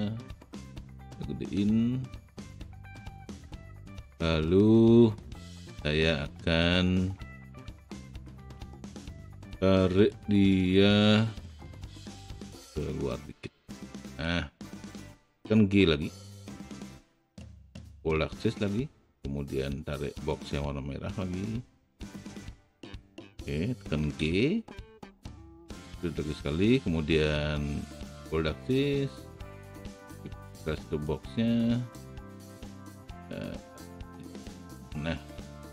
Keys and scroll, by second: 16.7 g, 24.3 g.